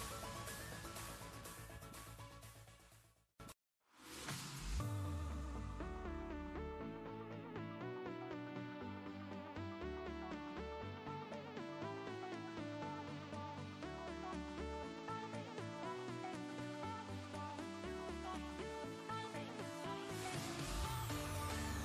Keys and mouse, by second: 3.7 ctrl+space, 4.0 ctrl+click, 4.2-5.5 ctrl+space, 5.5 click, 5.6 click, 5.9-7.3 space, 8.3-9.1 drag, 14.7 click, 15.4-16.3 typing, 18.4 click.